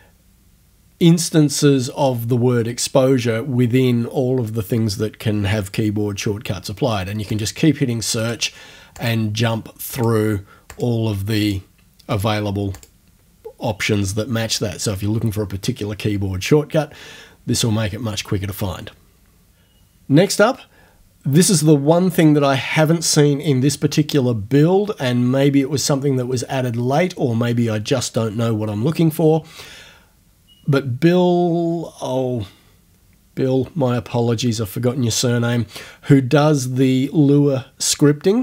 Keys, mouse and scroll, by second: 7.3 click, 8.2 click, 9.0 click, 10.0 click, 10.7 click, 11.4 click, 12.1 click, 12.7 click.